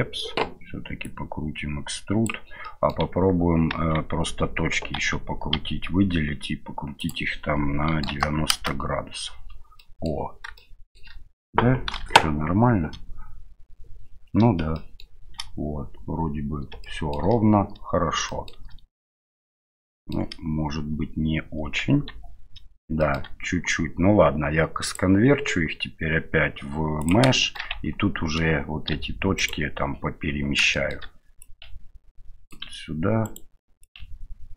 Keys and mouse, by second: 1.0-2.3 drag, 2.6 middle click, 3.7 Tab, 5.0 a, 5.5 a, 7.1-9.3 drag, 9.8 middle click, 10.6 shift+middle click, 12.0 KP_7, 14.7 shift+middle click, 16.8 shift+middle click, 18.3 shift+middle click, 19.9 shift+middle click, 21.9 Tab, 23.0 shift+middle click, 24.9-27.1 drag, 27.4 shift+middle click, 27.7 Tab, 28.9 1, 29.4 right click, 30.7 middle click, 31.4-32.5 drag, 33.2 right click, 33.8-34.5 ctrl+drag.